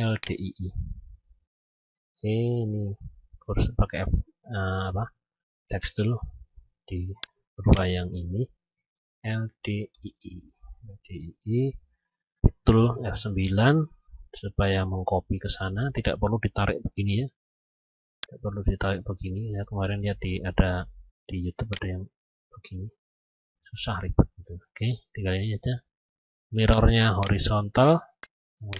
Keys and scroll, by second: 11.4 F9, 23.2 ctrl+z.